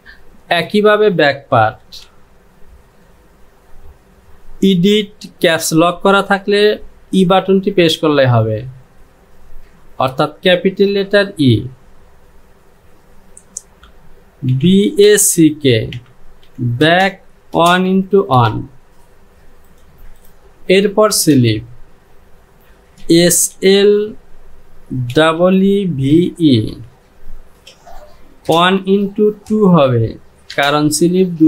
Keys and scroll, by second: 1.9 Home, 7.2 e, 14.6 b, 15.0 a, 16.9 space, 17.6 KP_1, 17.9 x, 18.4 KP_1, 20.0 j, 21.4 Home, 23.1 s, 26.2 v, 26.7 e, 27.4 space, 28.5 KP_1, 28.8 x, 29.6 KP_2, 30.6 Return.